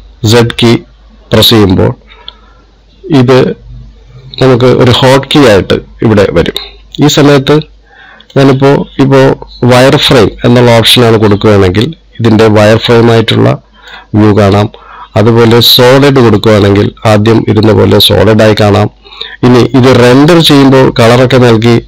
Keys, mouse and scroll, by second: 12.8 middle click, 15.0 z, 18.3 middle click, 19.4 z.